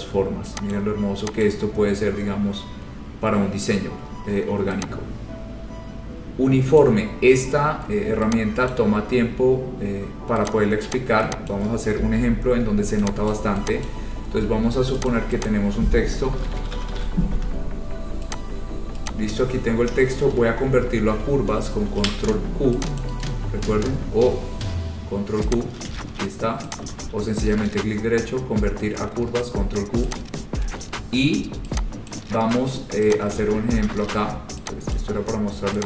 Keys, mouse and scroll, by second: 0.9 click, 1.6 click, 2.1-2.8 scroll, 3.2-3.6 scroll, 6.9 click, 8.9 click, 9.4-9.8 scroll, 9.9 scroll down 4, 10.6 click, 11.1 click, 12.0 click, 12.4-13.1 scroll, 13.4 click, 14.0 click, 15.3 click, 15.6 click, 16.2-17.5 typing, 18.5 click, 19.3 click, 19.7 scroll, 22.0 ctrl+q, 23.2 click, 23.4 right click, 25.7 click, 26.1 ctrl+z, 26.9 click, 27.1 ctrl+z, 27.8 right click, 30.3 click, 32.2 click, 33.3 click, 33.5 ctrl+z, 33.9 ctrl+z, 35.1 click.